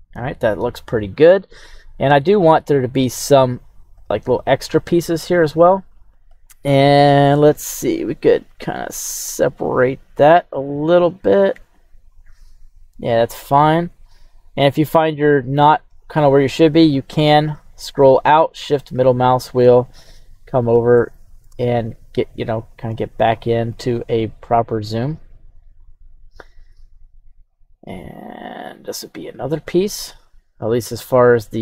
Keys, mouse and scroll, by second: 8.9 click, 12.1-13.4 drag, 14.2 click, 17.4-18.2 scroll down 2, 18.7-20.0 shift+middle drag, 20.0-20.5 scroll up 3, 20.9-21.4 shift+middle drag, 23.3 click, 25.8 click, 26.8 click, 30.0 click.